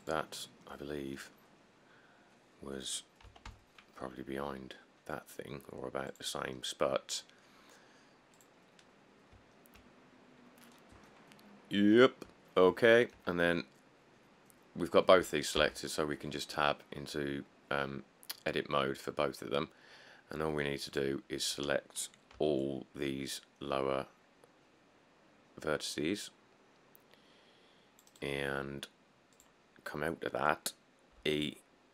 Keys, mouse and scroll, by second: 0.0 middle click, 0.0 ., 0.0 g, 1.3-3.5 scroll, 3.5 g, 3.7 y, 9.5 middle click, 10.0-11.1 scroll, 12.5 scroll, 15.8 Tab, 22.6 c, 31.4 e.